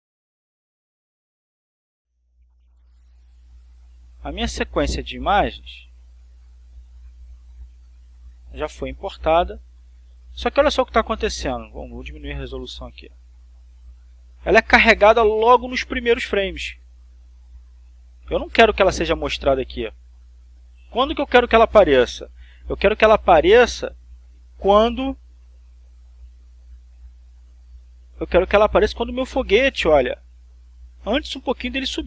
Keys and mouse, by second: 1.0-3.1 drag, 3.5 click, 4.4 click, 6.1 click, 7.0-8.9 drag, 9.4-12.3 drag, 12.5 click, 13.3 click, 14.5-23.5 drag, 23.7-28.6 drag, 29.0-32.0 drag.